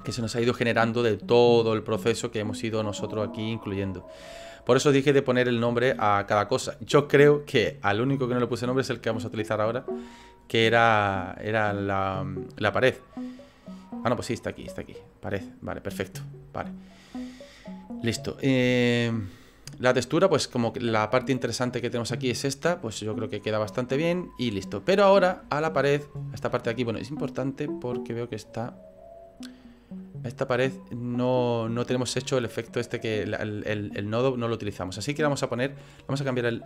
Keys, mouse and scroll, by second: 19.0 middle click, 23.4 middle click, 25.6-26.1 scroll up 2.